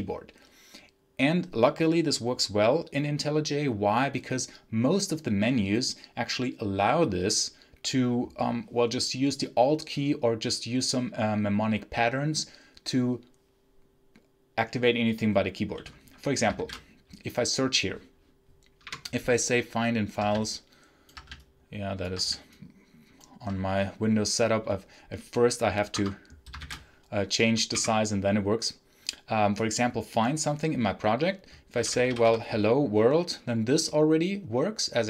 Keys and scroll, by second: 16.4 ctrl+shift+f, 18.7 BackSpace, 25.8 Escape, 26.5 ctrl+shift+f, 27.6 BackSpace, 31.4-32.6 typing.